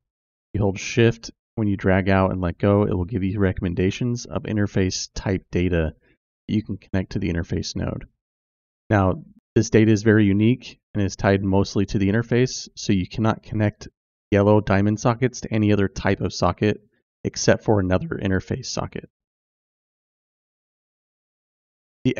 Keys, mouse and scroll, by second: 19.8 click.